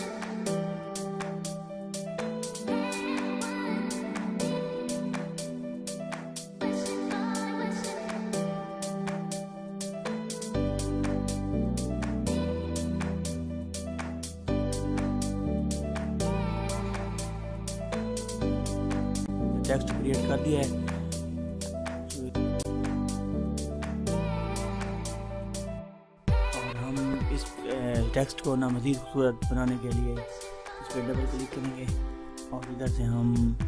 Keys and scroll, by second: 1.4 ctrl++.